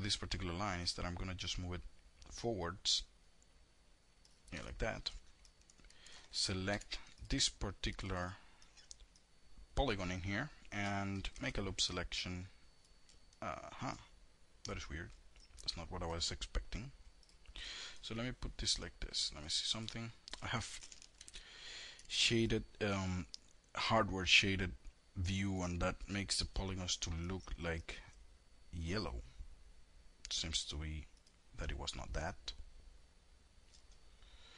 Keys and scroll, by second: 5.9 4, 8.2 F2, 10.4 alt+l, 14.1 l, 17.0 F3.